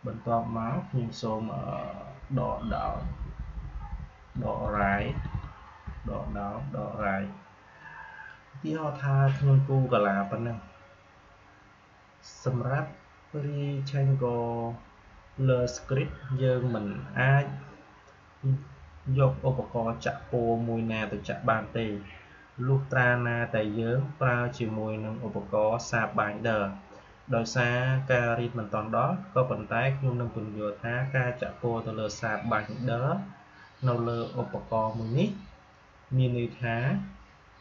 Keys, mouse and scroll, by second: 2.1 Down, 4.3 Left.